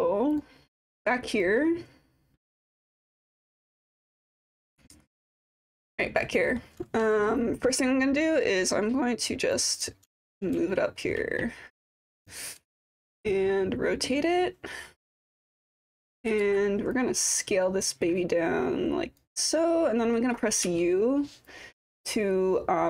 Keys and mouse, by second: 0.4-0.9 drag, 1.0-1.4 alt+drag, 2.8-4.1 drag, 4.6 click, 5.5 alt+click, 6.5 alt+middle click, 9.6 click, 9.8 typing, 10.7 alt+middle click, 10.9 alt+click, 12.0 click, 13.1-15.2 drag, 16.2 e, 16.4 r, 17.0-19.2 drag, 21.5-22.8 drag.